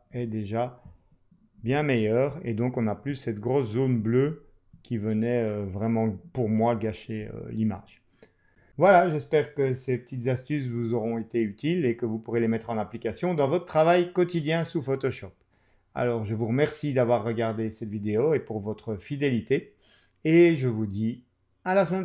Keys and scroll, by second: 1.5 super+-.